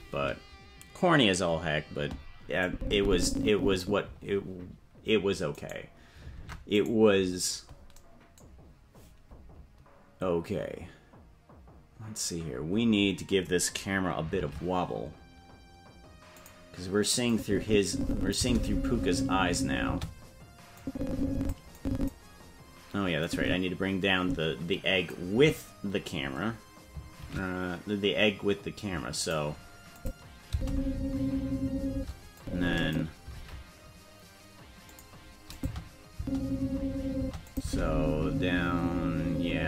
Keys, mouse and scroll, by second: 2.6-3.8 drag, 5.5 right click, 6.3 ctrl+Tab, 6.7 right click, 14.3 shift+`, 17.2-18.3 drag, 18.3 space, 19.8 space, 20.7 click, 21.7 click, 23.2-25.1 drag, 25.3 Left, 27.1 shift+`, 29.9 click, 30.4 space, 31.9 space, 32.3 click, 33.3 shift+`, 35.5 click, 36.1 space, 37.2 space, 37.4 click, 37.6 space.